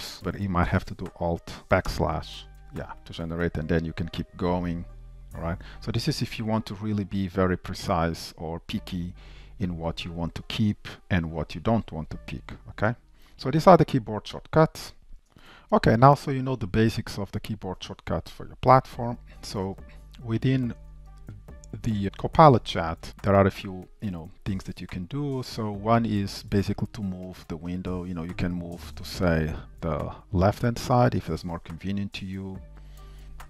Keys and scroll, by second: 1.9 alt+\, 4.6 super+Right, 15.1 super+z, 20.1 shift+super+a.